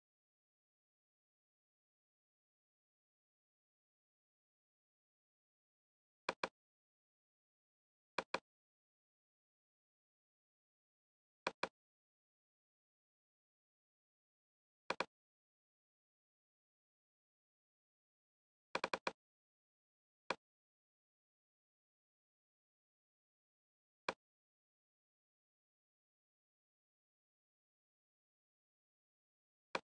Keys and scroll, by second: 13.2 super+g.